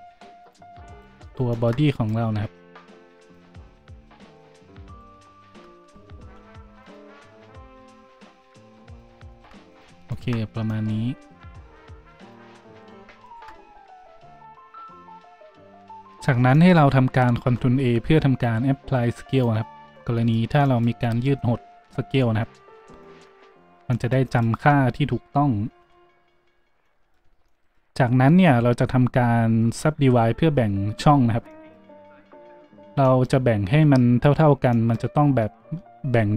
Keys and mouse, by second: 0.5 click, 0.9 middle click, 0.9 right click, 1.3-6.9 right drag, 5.5 s, 5.9 s, 6.9-8.0 middle drag, 7.2 Tab, 8.0-9.7 right drag, 9.8 shift+right click, 10.2 right click, 10.3-12.8 drag, 12.8 middle click, 12.9 shift+click, 13.2 shift+middle click, 13.3-36.3 shift+drag, 15.9 Tab, 17.4 ctrl+a, 26.5 n.